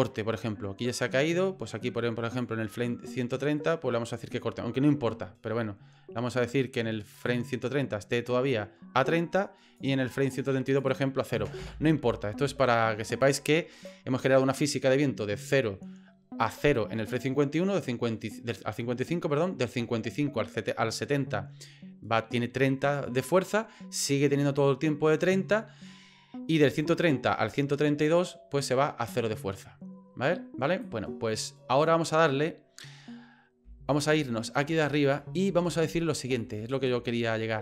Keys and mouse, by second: 7.1 click, 9.4 click, 10.7-12.3 drag, 13.1 click, 13.8 click, 14.2-28.0 drag, 30.8-31.9 drag, 34.0 middle click, 34.8 shift+middle click, 36.5 shift+middle click, 37.0 middle click, 37.5 middle click.